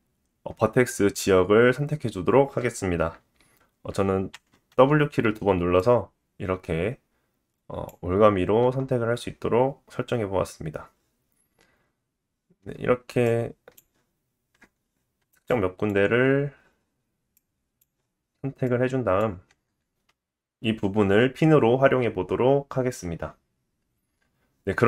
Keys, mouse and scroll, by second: 4.3 w, 4.7 w, 13.2 shift+click, 17.3 shift+click, 18.7 shift+click.